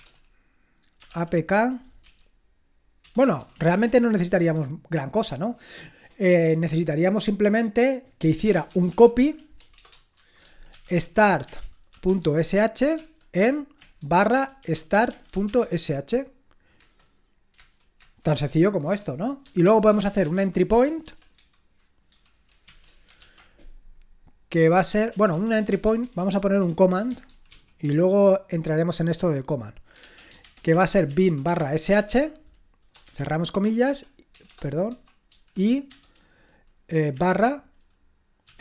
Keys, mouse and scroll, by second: 0.0-4.4 typing, 8.3-16.1 typing, 16.8 Return, 17.6 Return, 18.0 typing, 19.4-23.2 typing, 25.1-28.0 typing, 29.8-38.6 typing.